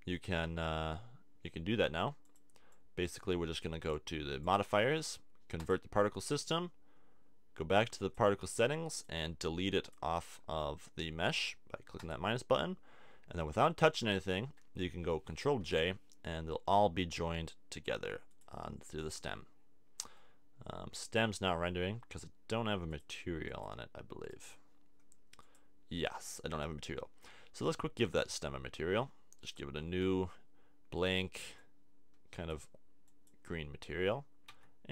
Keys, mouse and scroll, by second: 0.0 click, 1.5 click, 8.0-11.8 drag, 12.0-14.6 drag, 14.6 middle click, 15.6 ctrl+j, 20.0 middle click, 34.5 Tab.